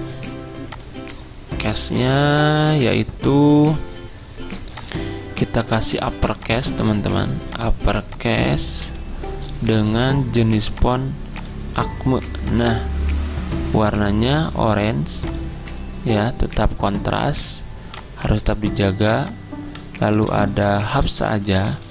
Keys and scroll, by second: 21.0 ctrl+a.